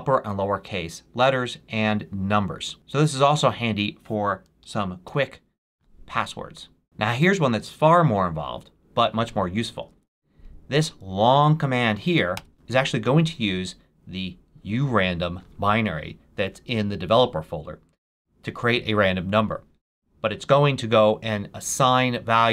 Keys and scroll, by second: 4.5 Up, 5.0 Return, 9.7 super+v, 12.3 Return.